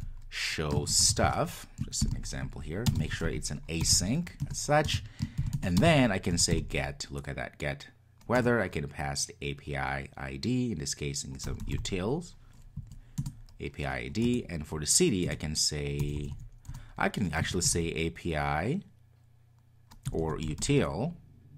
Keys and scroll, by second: 4.4 Return, 13.1 Return.